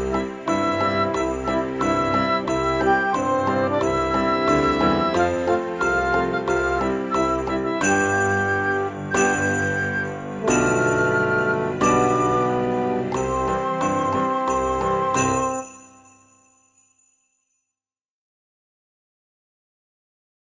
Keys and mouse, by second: 0.0 click, 0.7 Tab, 1.3 right click, 1.7 click, 2.9 click, 6.1 click, 6.9 KP_4, 8.5 click, 9.4 shift+middle click, 11.6 shift+middle click, 14.4 shift+middle click, 15.4 Tab, 16.0 shift+middle click, 18.6 click, 19.6 e.